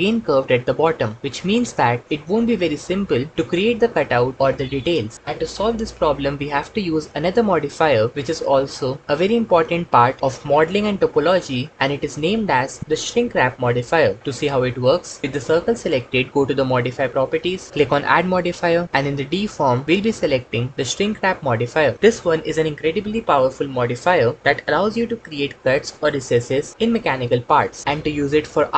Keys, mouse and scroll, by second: 18.3-21.7 drag.